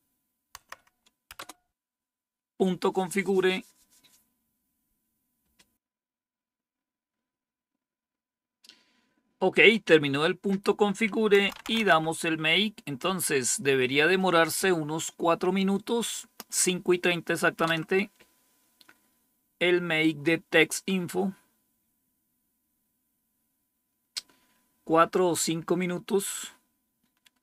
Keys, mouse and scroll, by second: 0.5 Tab, 1.3 Return, 11.1-12.2 typing, 17.5 Return.